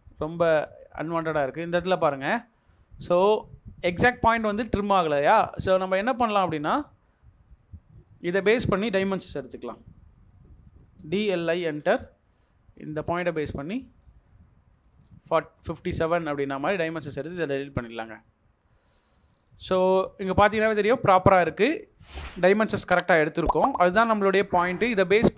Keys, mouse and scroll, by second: 0.2 double click, 0.6 double click, 1.0 double click, 6.0 middle click, 7.9 double click, 8.4-10.9 scroll down 1, 10.7-11.9 typing, 14.4 scroll up 1, 14.5-15.2 typing, 15.0 scroll, 15.1-15.5 scroll down 1, 15.7 middle click, 16.6 Escape, 17.2 double click, 17.5 Delete, 18.0 scroll up 1, 19.2-19.6 scroll down 1, 19.9 middle click, 20.3 scroll up 1, 21.2 middle click, 21.6 scroll down 1.